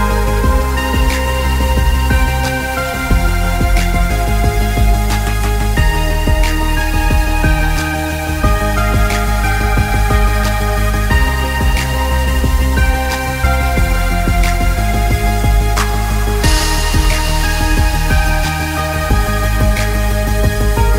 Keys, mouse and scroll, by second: 0.8 space, 1.7 click, 5.2 space, 5.7 click, 6.1 alt+scroll down 1, 6.4 alt+scroll up 2, 6.6 click, 7.3 click, 7.7 z, 7.9 click, 8.8 z, 9.1 click, 11.0 alt+scroll down 1, 11.2 alt+scroll up 2, 11.4 click, 11.5 space, 11.8 click, 13.5 click, 14.1 alt+scroll down 1, 14.4 scroll up 1, 14.6 click, 15.3 click, 15.7 alt+scroll down 1, 15.9 click, 16.0 space, 16.1 alt+scroll up 1, 16.4 click, 18.0 click, 18.4 alt+scroll down 1, 18.7 space, 19.3 alt+scroll up 2, 19.6 click, 20.6 click, 20.8 alt+scroll down 2.